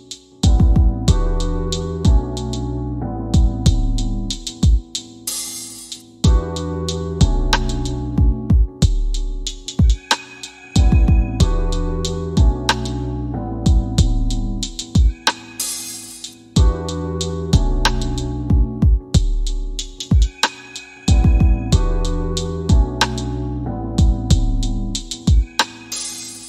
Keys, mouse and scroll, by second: 7.6 click, 10.1-12.0 drag, 22.6-25.1 drag.